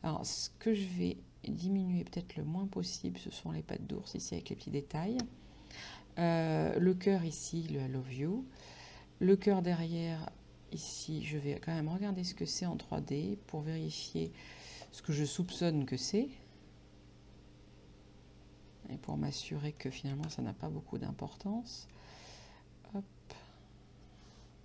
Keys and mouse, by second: 14.3 click, 15.5 click, 19.4 middle click, 20.3 KP_5, 21.4 middle click, 22.3 right click.